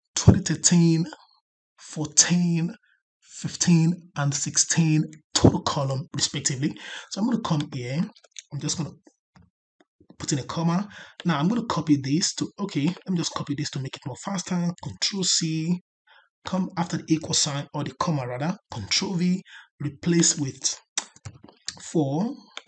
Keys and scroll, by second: 14.6 ctrl+c, 18.6 ctrl+v.